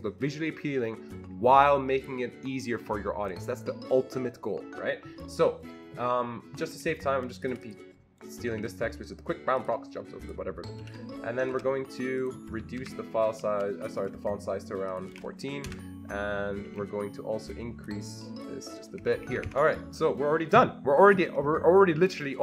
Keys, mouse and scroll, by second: 6.7 click, 7.5 double click, 7.7 click, 8.5 ctrl+c, 9.6 click, 10.2 click, 10.8 ctrl+v, 11.5 ctrl+a, 11.5 ctrl+v, 11.5 click, 12.2 click, 12.8 ctrl+a, 14.0 click, 14.8-15.6 typing, 14.9 click, 15.7 Return, 16.7 Escape, 18.3 click, 19.0 Escape, 19.2 Escape, 19.3 Escape, 19.4-21.7 Escape.